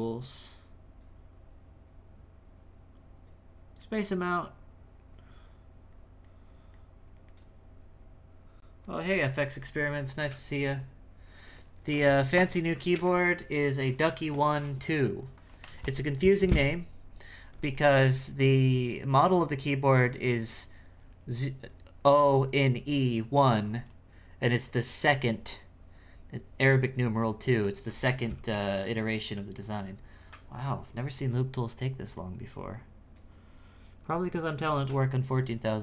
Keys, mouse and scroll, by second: 0.2-3.3 drag, 3.7-35.8 drag.